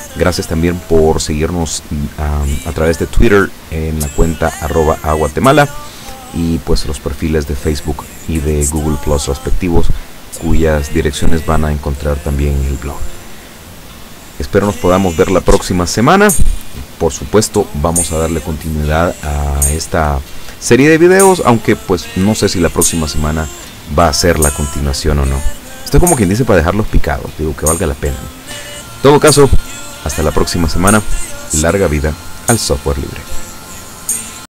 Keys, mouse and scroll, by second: 34.5 click.